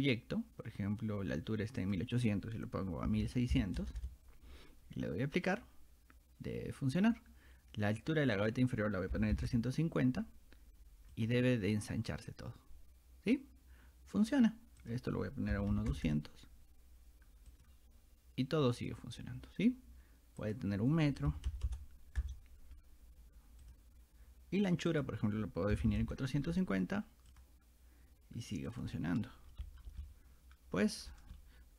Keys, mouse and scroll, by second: 1.8 click, 5.5 click, 8.4 click, 11.2 click, 14.8 click, 17.5 click, 20.4 click, 23.7 click, 24.9 click, 27.3 click, 28.7 click, 29.5 shift+middle click, 30.0-31.1 shift+middle drag, 31.4-31.7 shift+middle drag.